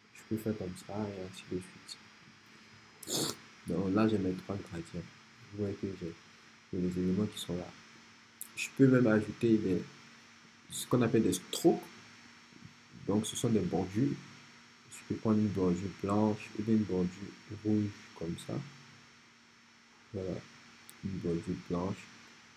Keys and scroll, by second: 3.1 Return.